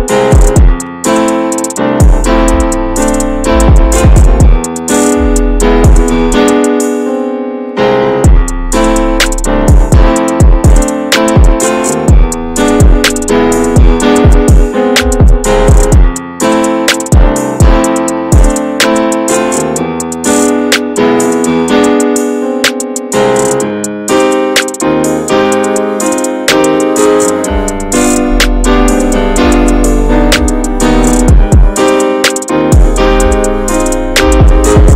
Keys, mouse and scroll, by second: 1.0 click, 1.6-2.6 middle drag, 2.6-3.1 scroll up 1, 3.1 click, 3.6-7.9 middle drag, 7.9 click, 8.1 ctrl+a, 8.7 alt+middle click, 9.2 alt+z, 9.6 scroll down 2, 9.9 Tab, 10.3 alt+z, 11.7 click, 12.0 scroll up 3, 12.3 alt+z, 12.6 middle click, 13.5 alt+z, 14.1 shift+middle click, 14.7 click, 15.2 shift+middle click, 15.4-15.9 scroll up 1, 15.9 middle click, 16.6-17.1 scroll up 1, 17.1 Tab, 17.2 click, 17.7 ctrl+a, 17.8 scroll down 2, 18.1-19.5 middle drag, 19.5 drag, 19.7 scroll down 2, 19.9-20.2 middle drag, 20.2 ctrl+s, 20.5-21.2 shift+middle drag, 21.2 ctrl+s, 21.6 click, 22.5 click, 23.4 BackSpace, 24.1 click, 24.4 shift+d, 25.9 click, 26.3 BackSpace, 26.9 click, 27.5 click, 28.2-28.9 middle drag, 28.9 ctrl+s, 29.2 click, 29.4 middle click, 29.8 ctrl+s, 32.3-34.9 drag.